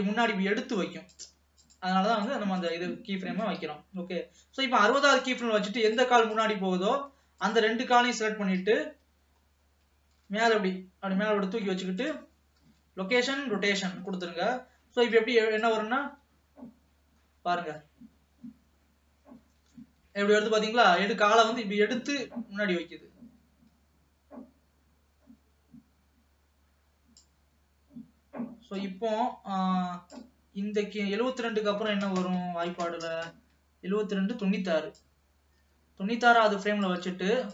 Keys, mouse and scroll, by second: 0.2 space, 1.3 click, 1.8-3.1 shift+drag, 3.7-5.5 drag, 5.5 middle click, 6.0 click, 6.5 click, 7.5 shift+click, 8.7 KP_3, 9.5 scroll up 2, 10.3 g, 12.7 i, 14.3 ctrl+s, 15.3 click, 16.2 space, 19.6 space, 20.4 ctrl+s, 22.2-25.1 drag, 28.9-31.9 drag, 35.2-37.5 drag.